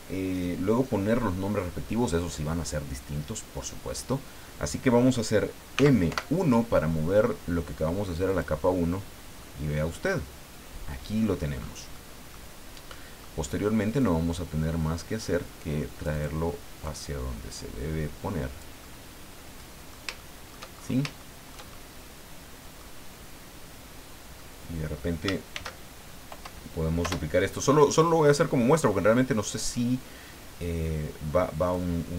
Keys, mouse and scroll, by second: 5.7 m, 6.1 1, 8.3 click, 8.7-9.0 scroll down 2, 9.4-11.4 middle drag, 11.6-11.9 scroll up 2, 11.9 middle click, 12.9 middle click, 14.0-16.4 drag, 16.8-18.8 drag, 18.8-20.1 middle drag, 20.2 shift+middle click, 21.2 shift+middle click, 22.0 middle click, 23.7-24.1 scroll down 2, 24.4 middle click, 25.5 shift+d, 27.0 Return, 28.0-31.9 drag.